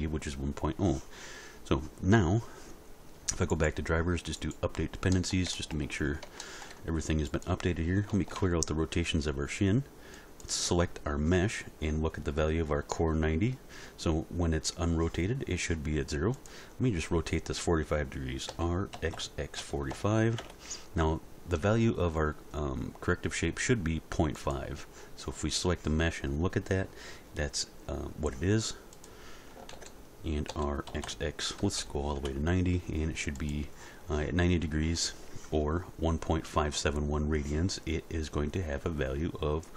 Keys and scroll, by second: 8.3 alt+r, 18.5 r, 18.9 x, 19.6 4, 19.9 5, 20.4 Return, 29.7 alt+r, 30.4 r, 30.9 x, 31.6 9, 31.8 0, 32.1 Return.